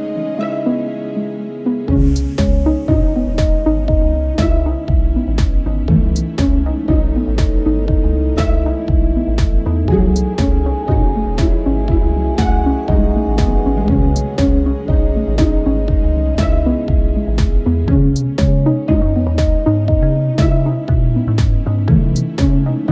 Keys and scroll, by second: 1.5 ctrl+r, 2.5 ctrl+e, 5.0 ctrl+e, 9.1 ctrl+z, 11.7 ctrl+e, 16.4 ctrl+s, 18.1 Tab, 18.7 Tab, 21.9 Tab, 22.3 alt+z.